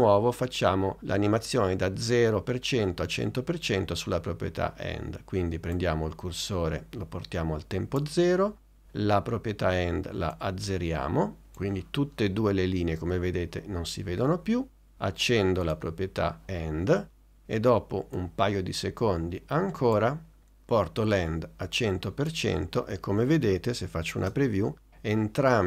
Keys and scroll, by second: 24.3 space.